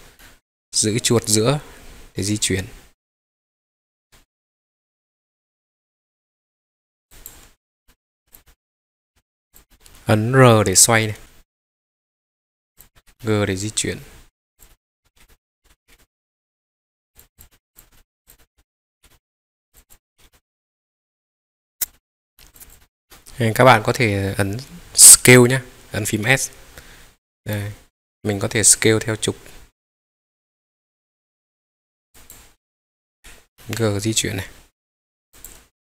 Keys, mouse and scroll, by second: 0.2-6.9 middle drag, 7.1-7.7 drag, 7.8 middle click, 7.8 scroll up 2, 8.3 click, 8.4 middle click, 9.5 click, 9.6 scroll down 1, 9.7 middle click, 11.2 r, 13.0 click, 13.0 g, 13.2-14.4 middle drag, 14.5 click, 14.7 middle click, 15.2 middle click, 15.2 g, 15.6 Escape, 15.9 g, 15.9-17.0 middle drag, 17.1 click, 17.2 scroll down 1, 17.3 click, 17.5 middle click, 17.7 click, 17.8 scroll up 2, 17.9 middle drag, 18.2 click, 18.3 middle click, 19.0 g, 19.0 middle click, 19.7 click, 20.1 g, 20.3-21.7 middle drag, 21.8 click, 21.9 middle click, 22.2 scroll down 3, 22.3 middle click, 22.5 click, 22.7-32.1 middle drag, 27.5 s, 32.1 click, 33.1 g, 33.6-35.2 middle drag, 35.4 click, 35.7 scroll down 1.